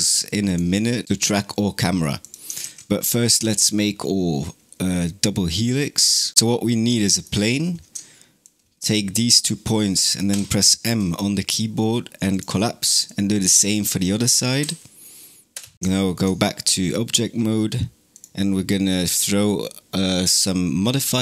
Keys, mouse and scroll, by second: 0.3 click, 2.0 click, 2.5 shift+a, 6.3-6.8 scroll up 5, 6.8 shift+middle click, 7.3-8.3 scroll up 3, 8.3 click, 10.1 m, 12.9 click, 14.4 m, 15.7-18.0 shift+middle drag, 18.0 click.